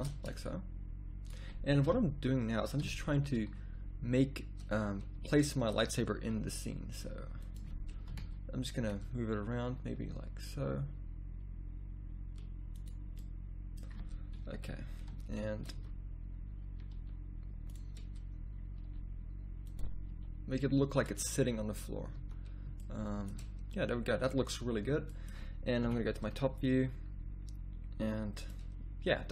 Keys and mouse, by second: 1.8 KP_3, 2.8 KP_1, 3.1 z, 4.7 z, 6.4 g, 8.1 KP_3, 9.8 r, 14.3 KP_1, 15.7 z, 16.9 r, 18.8 r, 20.1 g, 22.1 z, 25.8 KP_7.